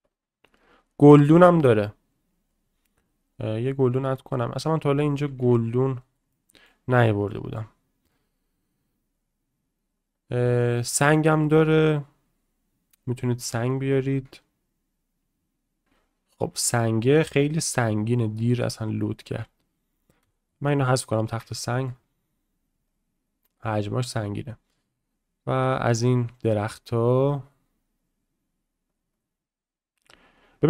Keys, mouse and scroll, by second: 4.5 click, 6.3-6.6 middle drag, 7.3 click, 8.3-15.8 drag, 16.5 s, 17.8 drag, 18.4-18.9 drag, 21.6 shift+middle drag, 22.3-30.6 drag.